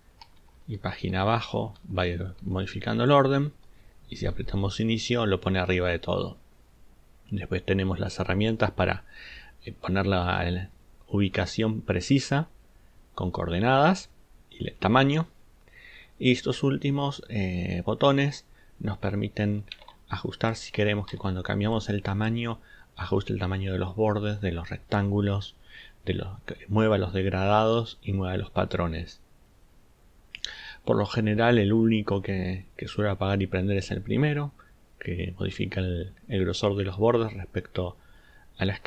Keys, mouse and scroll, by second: 20.5-21.3 ctrl+shift+drag.